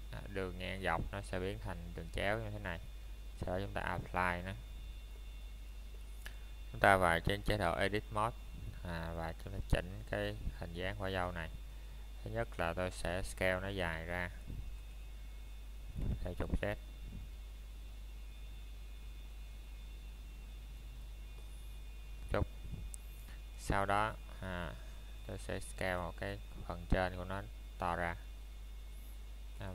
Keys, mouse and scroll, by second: 2.2 click, 6.9 click, 9.9 click, 11.1 middle click, 18.1 click, 19.0 middle click, 19.3 scroll down 1, 20.0 middle click, 21.2 Tab, 22.3 click, 22.8 middle click, 26.9-27.3 scroll down 1, 27.3 middle click.